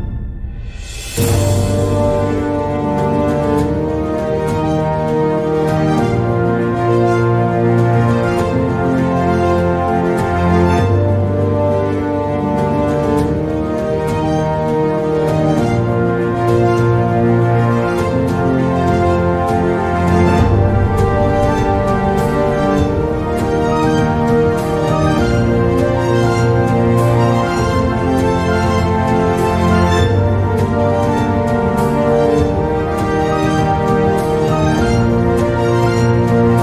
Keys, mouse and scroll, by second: 1.1 r, 3.5 e, 6.7 s, 8.5 r, 10.2 e, 12.2 s, 14.2 r, 16.7 e, 18.9 s, 33.4 click, 34.8 click, 35.7 click, 36.5 shift+a.